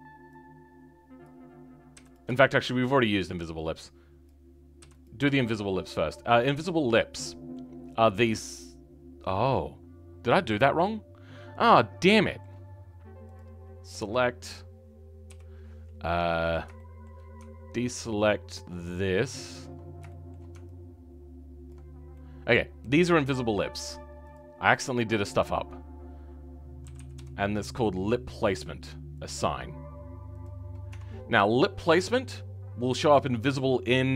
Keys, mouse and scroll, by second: 1.2 click, 2.3 shift+middle click, 2.8-4.2 scroll up 2, 4.2 click, 5.0 m, 5.3 shift+middle click, 5.9-6.6 scroll down 12, 6.9-9.1 middle drag, 9.1-11.1 scroll down 3, 11.1-12.1 scroll up 3, 12.1-13.3 shift+middle drag, 13.3 click, 13.5-13.9 scroll down 2, 13.9-15.2 middle drag, 15.2 KP_7, 16.4 click, 16.7-19.2 shift+middle drag, 19.2 ctrl+click, 19.7 scroll up 2, 20.0-21.6 shift+middle drag, 21.6 ctrl+click, 21.8 scroll down 2, 22.1-24.3 middle drag, 24.3-30.6 drag, 30.6 scroll up 2, 30.8 Tab, 31.4-33.5 shift+middle drag, 33.5 scroll down 2.